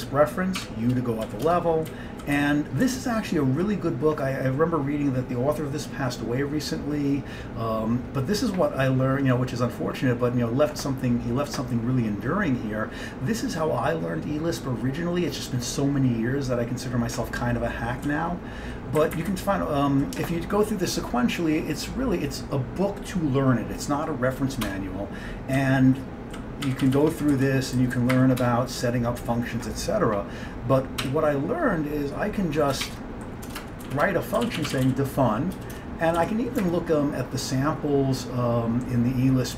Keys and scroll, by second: 0.7 u, 1.4 Down, 1.5 Return, 2.0 Down, 2.4 Page_Down, 2.9 Down, 3.1 typing, 3.4 Down, 3.7 Down, 3.8 Down, 18.1 Down, 18.6 Down, 18.7 Down, 19.1 Up, 19.2 Up, 19.4 Right, 19.9 Right, 20.0 Right, 24.7 Return, 25.7 Down, 26.2 Down, 26.3 Down, 26.7 Down, 26.9 Down, 27.0 Down, 27.4 Right, 27.9 Right, 28.0 Right, 28.2 Up, 28.5 Return, 31.1 q, 32.7-36.7 typing.